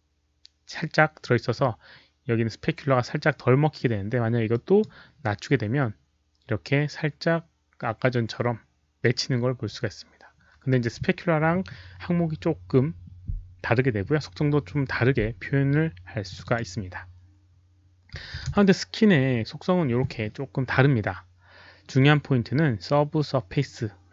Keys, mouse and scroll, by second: 4.4-4.7 drag, 11.0 click, 16.3 click, 18.1 click, 18.1 KP_Decimal, 18.3 KP_3, 18.4 Return, 23.4 Return, 23.4 click, 23.4 KP_3, 23.4 KP_Decimal.